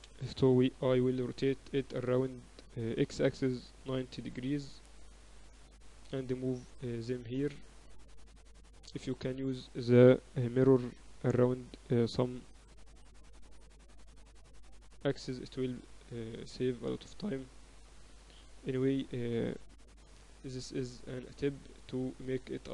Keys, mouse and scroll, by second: 0.0 Escape, 1.5 r, 6.5 middle click, 7.4-9.0 drag, 9.0 middle click, 9.8-11.7 right drag, 11.4-12.5 middle drag, 13.8 ctrl+alt+shift+c, 16.1 middle click, 17.1 middle click, 17.4-19.4 drag, 19.2 z, 20.8 shift+b.